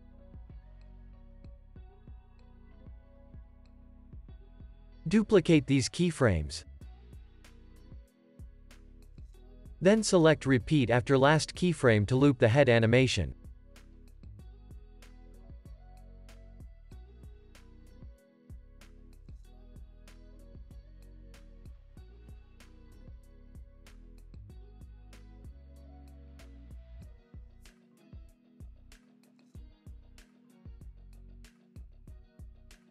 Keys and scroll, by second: 0.1 super+v, 0.9 space, 3.5 space, 3.8 super+s, 9.6 super+s, 14.6 super+c, 15.4 super+v, 15.7 super+s, 19.0 super+c, 22.5 BackSpace, 23.4 super+c, 23.6 super+v, 25.3 BackSpace, 28.5 super+z, 32.0 Delete.